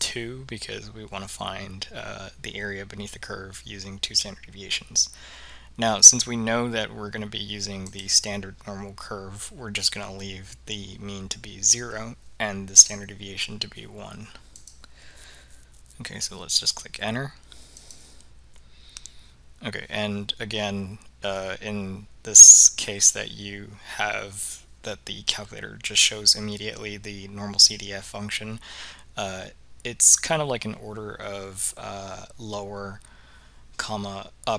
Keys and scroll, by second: 0.0 2, 8.0 Return, 12.9 Return, 14.7 Return, 17.9 Return.